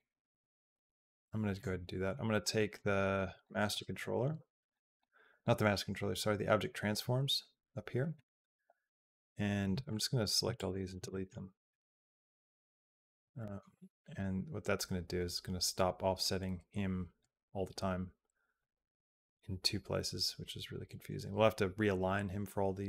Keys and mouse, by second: 9.5 b, 10.2 x, 11.0 middle click, 13.3 middle click, 14.0-17.1 drag, 18.4-22.8 drag.